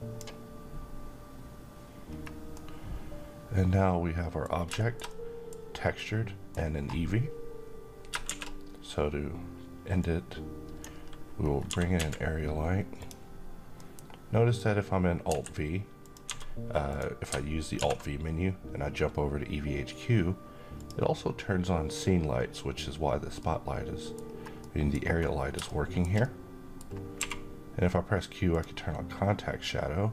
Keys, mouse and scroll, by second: 1.6-2.0 scroll up 1, 2.0-4.2 middle drag, 3.9 scroll down 1, 4.2-5.1 middle drag, 7.7 shift+a, 9.5-10.4 drag, 10.9 scroll down 1, 11.2 typing, 12.4 click, 13.3-14.2 middle drag, 14.8 r, 15.5 click, 15.8 g, 16.4 click, 17.3 alt+v, 20.2 click, 22.8-23.8 middle click, 23.7 scroll up 1, 24.1-24.7 middle click, 24.6 scroll up 1, 24.7 scroll down 1, 25.1-26.3 middle drag, 26.7 q, 28.0 click, 29.1-30.0 middle drag.